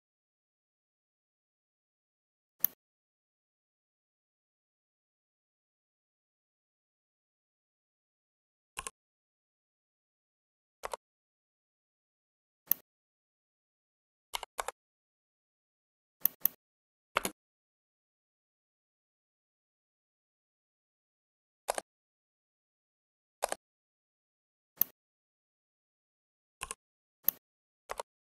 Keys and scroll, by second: 14.2 4, 14.6 Return.